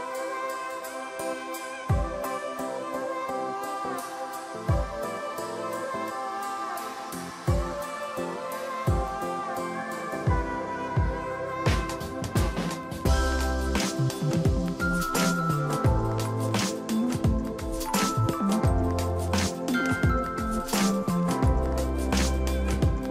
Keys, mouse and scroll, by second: 1.1 ctrl+j, 1.3 ctrl+j, 7.6-8.6 scroll down 1, 8.8 shift+click, 10.0 ctrl+g, 11.5 ctrl+a, 15.6 ctrl+d, 16.7 right click, 22.5 right click.